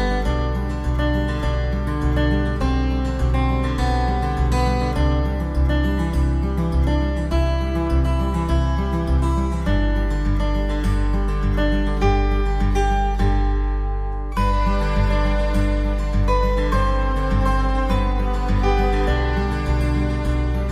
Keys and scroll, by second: 15.7 ctrl+z.